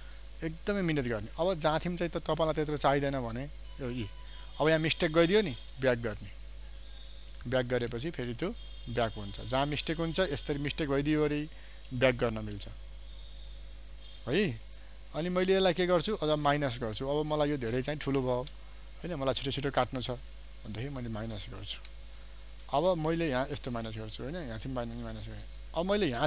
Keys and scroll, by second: 2.4 ctrl+space, 14.9 ctrl+space, 16.2 ctrl+alt+space.